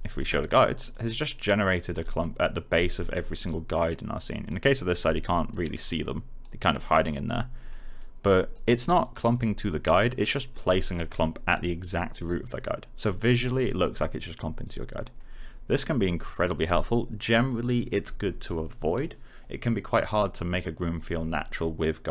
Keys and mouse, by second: 1.3 middle click, 3.4 alt+click, 4.6 alt+right click, 5.8 alt+click, 6.6 alt+right click, 7.3 alt+middle click, 7.9 alt+right click, 8.9 alt+click, 9.5 alt+middle click.